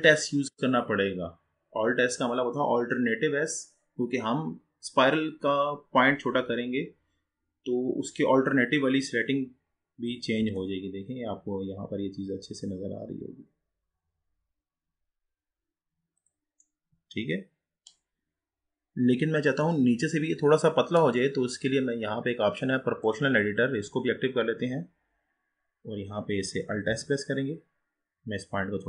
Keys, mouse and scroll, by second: 10.4 alt+s, 16.7-19.7 middle drag, 20.1-21.9 scroll up 3, 21.9-23.1 scroll up 1, 23.1 click, 24.2-24.9 scroll down 6, 26.9 alt+s.